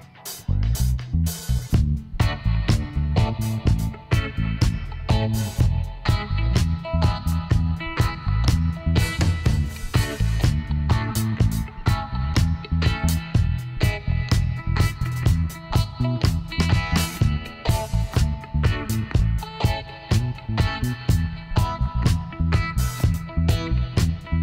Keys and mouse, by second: 0.7-2.4 middle drag, 2.4 right click, 2.7 l, 3.2 middle click, 4.1 KP_7, 5.7 e, 10.9-20.2 middle drag, 20.2-21.9 right drag, 21.9-24.4 middle drag, 24.1 e.